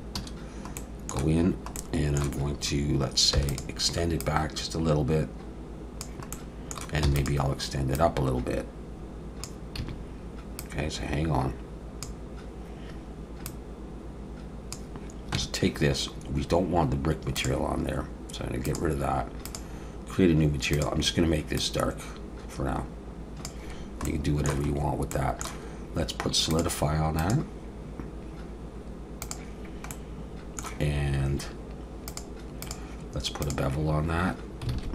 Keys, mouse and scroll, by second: 0.2 a, 0.8 middle click, 3.4 e, 4.2 click, 6.3 middle click, 7.0 e, 7.9 click, 9.8 a, 10.6 click, 13.5 click, 15.4 Tab, 17.4 click, 18.7 click, 24.0 middle click, 24.7-25.1 scroll up 2, 25.1 middle click, 26.5 click, 27.2 click, 29.9 middle click, 32.1 click, 32.6 click, 34.8 alt+a.